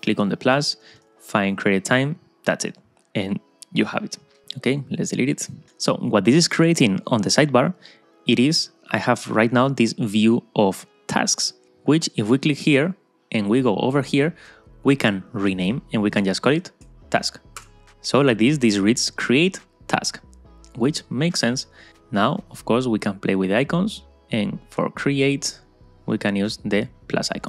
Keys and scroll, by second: 17.7 Return.